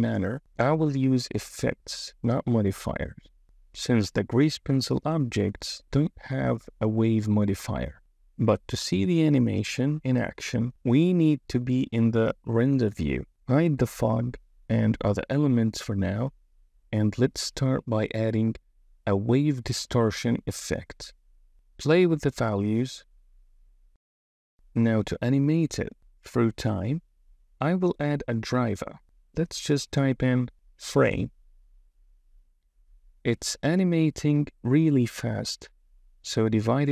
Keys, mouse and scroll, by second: 4.4 click, 12.8 click, 15.1 click, 16.5 click, 19.7-21.4 drag, 21.7-24.4 drag, 29.6-32.0 drag, 33.8 click, 34.2 space, 36.1-36.9 drag.